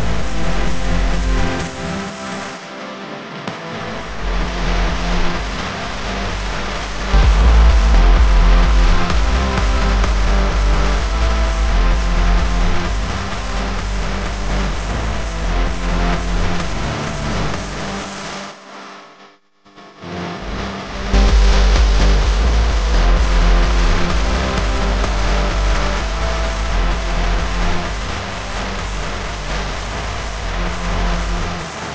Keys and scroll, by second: 0.0-0.4 typing, 1.9 space, 2.4 alt+super+space, 2.5 alt+super+space, 2.6 alt+super+space, 3.0 typing, 5.7 space, 6.2 super+space, 6.3 super+space, 6.8 super+space, 9.3-14.0 typing, 13.6 super+space, 13.6 super+space, 13.7 super+space, 13.8 super+space, 14.3 super+space, 16.6-17.8 typing, 18.8-19.9 typing, 20.4 alt+super+space, 20.5 alt+super+space, 20.5 alt+super+space, 20.6 alt+super+space, 20.9 alt+super+space, 21.6 super+space, 21.8 super+space, 21.9 super+space, 23.0 space, 23.6 alt+super+space, 23.7 alt+super+space, 23.8 alt+super+space, 23.9 alt+super+space, 23.9 alt+super+space, 24.0 alt+super+space, 24.1 alt+super+space, 24.6 alt+super+space, 25.3 space, 26.1 m, 28.1-29.2 typing.